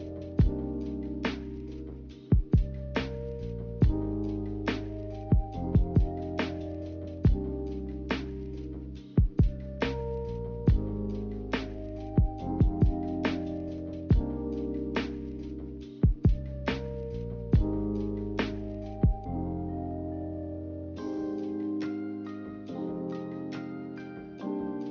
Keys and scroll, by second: 9.7 3.